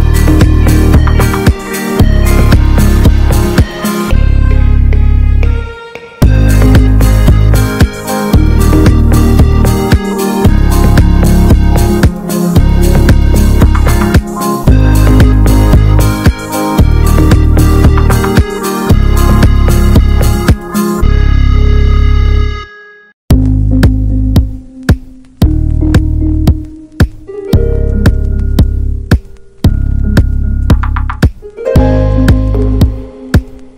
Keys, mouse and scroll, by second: 0.4 click, 0.9 ctrl+z, 1.2 s, 3.2 click, 4.1 middle click, 4.3 alt+z, 4.5 Tab, 4.7 click, 4.9 middle click, 5.0 Tab, 5.2 shift+middle click, 5.5 alt+z, 5.7 middle click, 6.2 scroll up 3, 6.4 middle click, 7.0 1, 7.3 click, 8.2 s, 10.1 Tab, 10.3 alt+middle click, 10.5 alt+middle click, 10.6 alt+z, 10.8 Tab, 10.9 scroll down 4, 11.1 shift+middle click, 11.7 Tab, 11.7 click, 12.1 ctrl+s, 12.3 shift+middle click, 12.5 click, 12.6 scroll down 2, 12.7 Tab, 12.8 a, 13.4 click, 14.1 Tab, 14.3 ctrl+a, 14.7 shift+middle click, 14.9 ctrl+s, 15.4 n, 16.1-17.7 drag, 18.0-19.9 drag, 19.9 n, 20.1 click, 20.3 Tab, 20.4 a, 20.6 scroll up 1, 20.8 alt+z, 21.6 r, 22.3 s, 23.1 click, 23.6 scroll up 3, 23.8 shift+middle click, 24.3 r, 24.7 s, 25.5-26.6 drag, 26.6 r, 28.0-29.2 drag, 29.2 alt+z, 29.4 Tab, 29.7 Tab, 30.2-31.6 drag, 31.6 alt+middle click, 31.7 alt+z, 32.2 click, 32.7 alt+middle click, 32.9 alt+z, 33.1 Tab, 33.5 Tab, 33.6 shift+middle click.